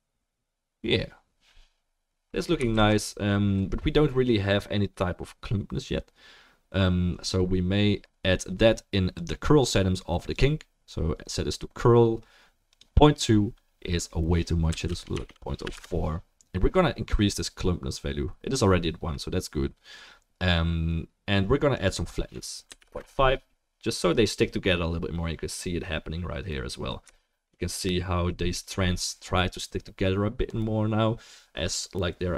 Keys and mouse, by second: 3.2 ctrl+s, 25.6-26.7 middle drag.